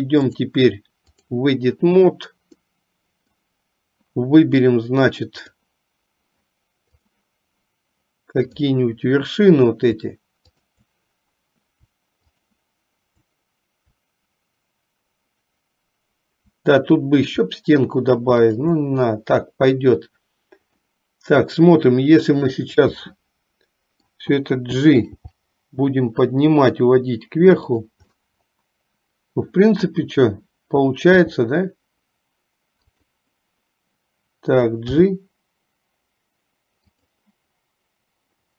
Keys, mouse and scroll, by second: 0.4-1.5 drag, 2.8 middle click, 5.5 click, 7.2 click, 12.3 shift+click, 18.4 shift+click, 20.9 middle click, 23.2-24.3 middle drag, 28.1-30.1 middle drag.